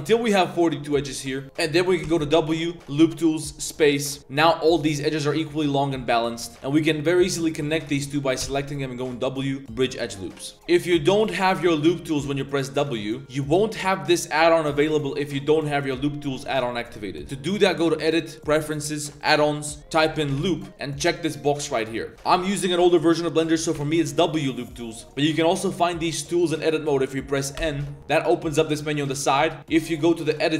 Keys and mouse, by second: 0.8 click, 1.3 2, 1.4 1, 2.0 w, 4.5 drag, 5.1 middle drag, 5.9 middle click, 6.2-7.1 typing, 7.5 alt+click, 7.9 alt+shift+click, 8.4 w, 10.0 drag, 10.4 drag, 10.5 ctrl+z, 10.5 2, 11.3 w, 17.5-18.5 drag, 22.1 w, 22.1 click, 23.7 w, 25.0 click, 25.0 n, 27.6 n.